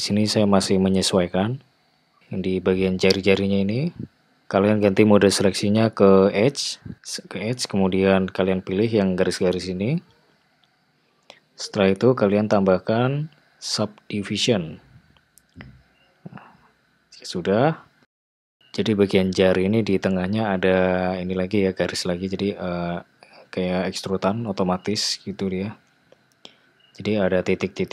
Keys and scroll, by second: 1.0 g.